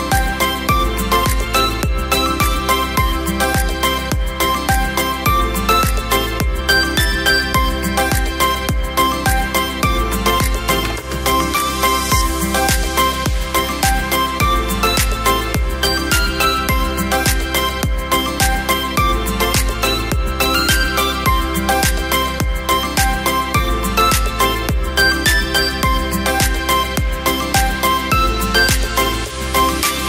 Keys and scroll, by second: 0.6 ctrl+a, 2.4 v, 9.5 Down, 9.6 Down, 9.7 Down, 9.8 Down, 10.3 Down, 10.3 Down.